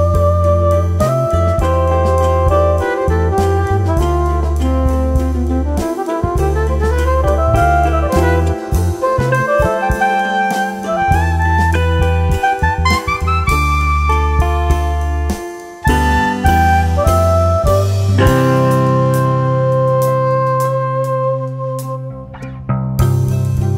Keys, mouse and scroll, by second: 0.7 drag, 1.3 click, 1.8-3.5 shift+middle drag, 4.4 drag, 5.0-6.0 scroll down 2, 8.0 click, 10.5 click, 12.4 click, 12.9-14.6 shift+middle drag, 14.6-15.1 shift+right drag, 15.1-15.7 scroll down 2, 15.9-17.1 scroll up 4, 17.3-21.4 shift+right drag.